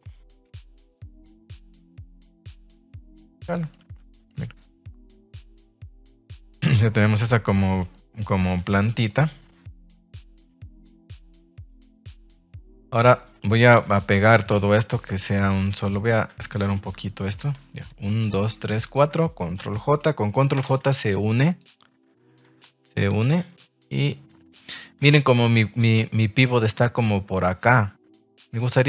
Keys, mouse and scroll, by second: 0.4 KP_3, 1.2 r, 2.5 click, 2.7 s, 3.7 g, 4.1 click, 4.8 click, 4.8 r, 5.2 a, 5.5-8.0 middle drag, 8.4 right click, 8.7-9.0 middle drag, 9.4 click, 11.1-11.4 middle drag, 11.4 a, 11.7 middle click, 13.1 shift+middle click, 13.7 KP_1, 14.5 shift+middle drag, 15.4 right click, 15.8 shift+right drag, 16.0 shift+right click, 16.5 s, 17.1 click, 17.3 a, 17.8 right click, 18.2 shift+right click, 18.5 shift+right drag, 18.8 shift+right click, 20.5 ctrl+j, 20.5 ctrl+u, 21.4 g, 22.1 Escape, 22.8 ctrl+s, 23.9 click, 25.1 shift+middle click.